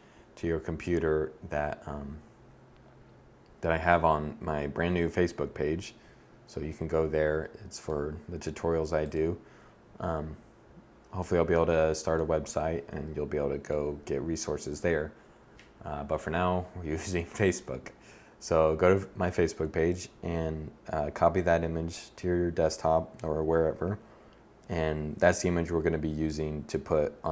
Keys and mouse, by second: 7.0-18.6 middle drag.